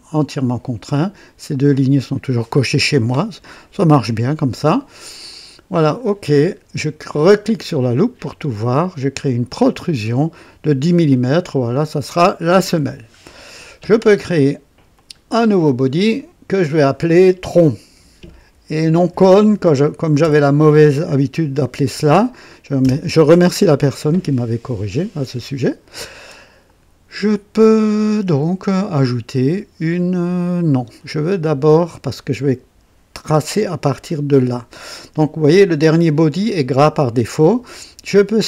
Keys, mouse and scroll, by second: 5.3 click, 7.4 click, 9.2 click, 11.7 click, 12.8-13.1 scroll down 2, 14.9 click, 16.6 click, 17.9 F2, 18.3-20.7 typing, 22.8 typing, 22.8 Return.